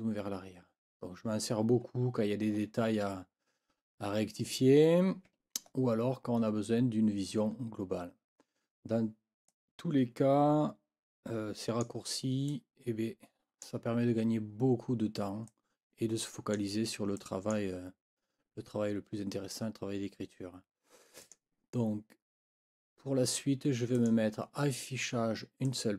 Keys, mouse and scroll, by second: 0.7 ctrl+scroll up 2, 1.9-2.7 ctrl+scroll up 4, 5.7-6.6 ctrl+scroll down 6, 7.4 ctrl+scroll down 2, 8.0-8.4 ctrl+scroll up 2, 9.5-12.0 drag, 12.5-13.8 drag, 15.5-16.7 drag, 17.2 click, 21.2 click, 24.0 click, 25.6 click, 25.8 scroll up 1.